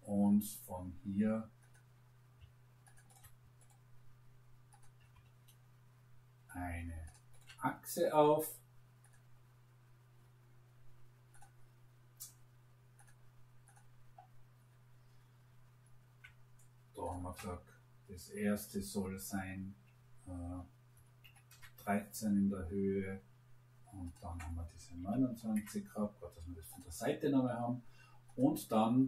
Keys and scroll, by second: 20.8 1, 21.2 3, 21.4 Return, 25.0 2, 25.2 9, 25.5 Return.